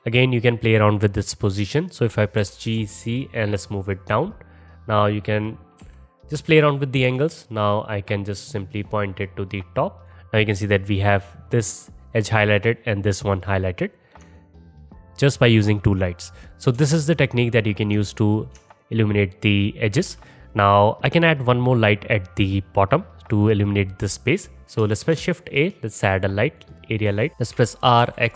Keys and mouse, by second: 0.0-9.9 alt+middle drag, 2.4 g, 5.8 KP_1, 7.1 r, 9.9 click, 10.1-14.9 middle drag, 14.9-17.8 alt+drag, 17.8-24.9 alt+shift+middle drag, 24.9 shift+a, 27.3 ctrl+z, 27.5 r.